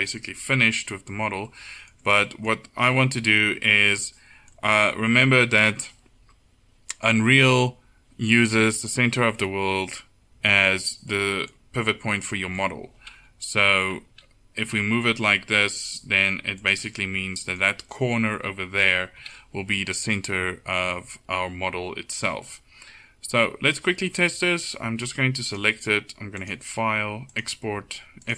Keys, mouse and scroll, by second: 13.2 KP_1, 14.7 g, 19.2 KP_7, 23.7-24.9 middle drag, 25.5-26.7 drag.